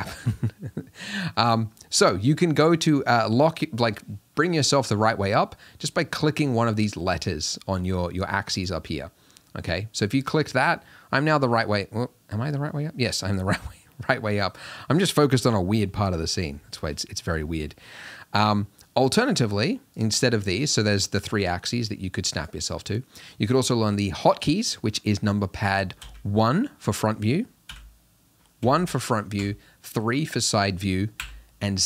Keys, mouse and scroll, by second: 8.6 Left, 10.8-20.0 middle drag, 20.0 click, 21.0 click, 21.5 click, 22.5 click, 26.0 KP_1, 27.7 KP_Decimal, 29.4 KP_3, 31.2 KP_7.